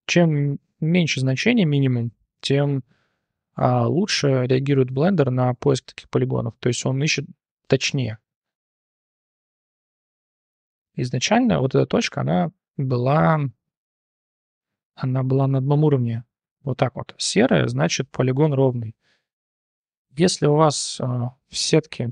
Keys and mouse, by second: 1.2-5.1 drag, 6.1 click, 9.9 click, 10.7 click, 11.3 g, 14.2-14.9 drag, 15.4 g, 17.2 click, 18.1 click, 18.8 click, 20.2 g.